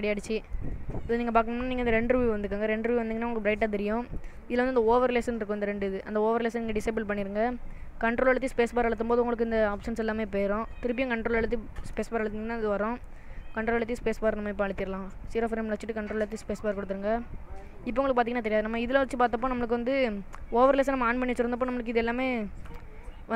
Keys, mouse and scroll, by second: 0.7 space, 2.2 click, 3.2 middle click, 6.2 click, 9.2 ctrl+space, 12.2 ctrl+space, 15.4 click, 16.4 ctrl+space, 18.9 ctrl+space, 21.0 click.